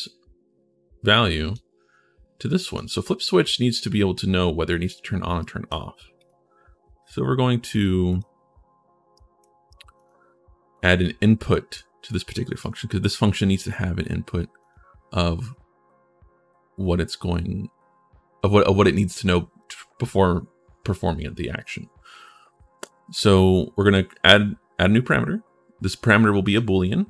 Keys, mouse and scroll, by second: 2.4 click, 5.2 right click, 5.9 click, 7.8 click, 8.9 right click, 9.7 right click, 10.5 right click, 12.3 right click, 14.4 click, 26.2 click.